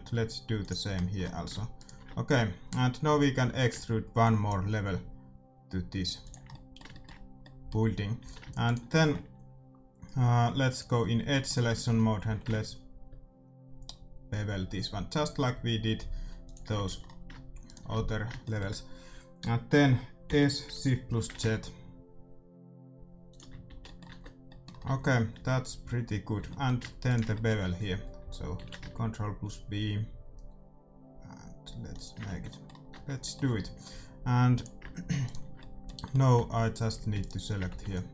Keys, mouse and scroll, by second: 1.0-3.2 middle drag, 1.7-3.7 right drag, 3.3 e, 6.4 middle click, 8.2 a, 8.6-10.5 right drag, 10.6-12.6 drag, 11.0-13.5 middle drag, 12.2 ctrl+b, 16.7-20.1 middle drag, 16.8 a, 17.6 right click, 20.4 s, 23.6-24.7 middle drag, 23.6 a, 24.0 Tab, 24.8 Tab, 25.3 a, 25.8 a, 26.3 a, 27.0-28.8 right drag, 28.5 ctrl+b, 28.8 middle click, 32.2 middle click, 32.2 Tab, 32.9 Tab, 33.4 a, 34.5-36.3 drag, 35.2-36.3 right drag, 36.3 c, 36.9 middle click, 37.6 c, 37.9-38.1 right drag.